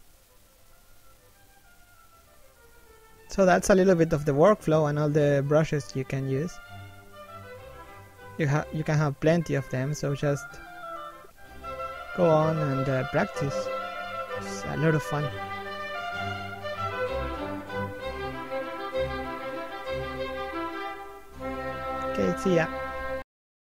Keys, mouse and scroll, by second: 1.0-1.4 scroll up 1, 1.4 middle click, 2.9 shift+middle click, 3.5-4.0 scroll up 1, 4.0 shift+middle click, 4.5-5.0 scroll down 1, 5.0 1, 5.6 shift+middle click, 6.8 click, 8.8 click, 10.7 click, 13.0 click, 15.4 click, 18.2 scroll down 1, 19.0 scroll up 1, 19.3 shift+middle click.